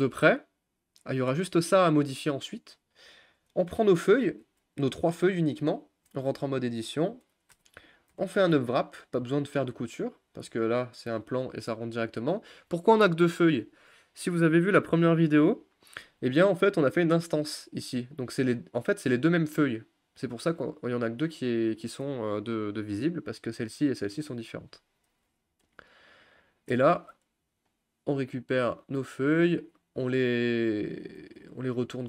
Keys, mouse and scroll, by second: 3.4 click, 4.4 Tab, 4.9 click, 5.7 shift+click, 6.8 Tab, 7.5 a, 9.6 u, 15.5 middle click, 15.9-18.7 scroll up 4, 26.7 a, 27.7-29.5 drag, 30.9 shift+click, 31.6 r.